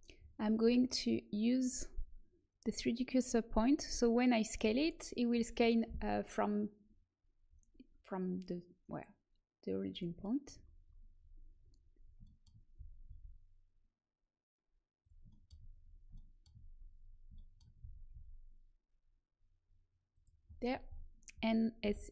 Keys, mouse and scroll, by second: 2.6-4.5 drag, 4.5 s, 10.6 middle click, 12.7 s, 15.6 middle click, 17.7 s, 21.8 s.